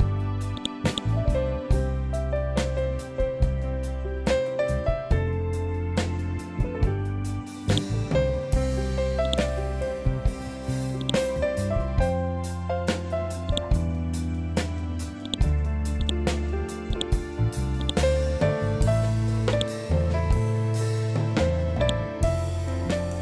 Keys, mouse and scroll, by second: 5.2 scroll down 1, 7.1 click, 7.9-8.5 scroll up 1, 8.7 click, 9.5 scroll up 1, 10.4-13.0 drag, 21.3-23.2 drag.